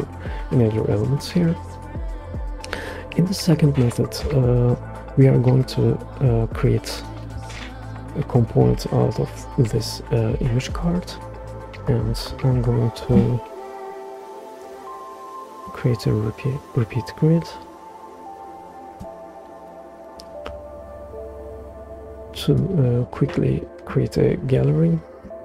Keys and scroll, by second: 7.3 super+k, 12.9 super+r.